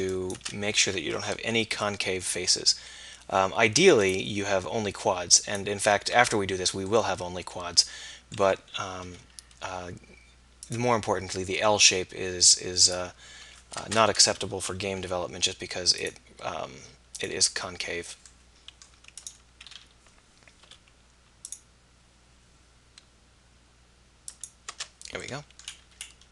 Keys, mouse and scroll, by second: 1.5 k, 7.0 middle click, 9.1 k, 15.0 k, 20.7 k.